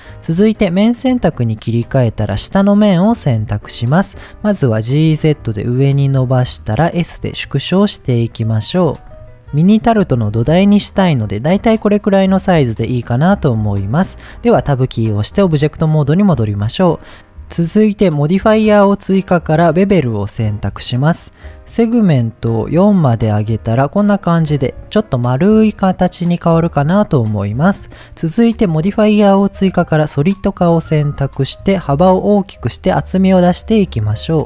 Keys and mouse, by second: 0.6 click, 1.5 middle click, 2.4 click, 3.3 middle click, 4.8 g, 5.1 z, 6.5 click, 6.9 s, 7.9 click, 8.2 middle click, 9.0 z, 9.6-13.3 middle drag, 14.9 Tab, 17.1-17.6 middle drag, 20.0 click, 21.3 click, 21.9 click, 22.4 click, 23.3-23.9 middle drag, 24.0-24.5 middle drag, 25.7-26.9 middle drag, 30.2 click, 32.3 click, 32.4 click, 32.6 click, 33.3 click, 33.8 click, 34.1 click, 34.3 click.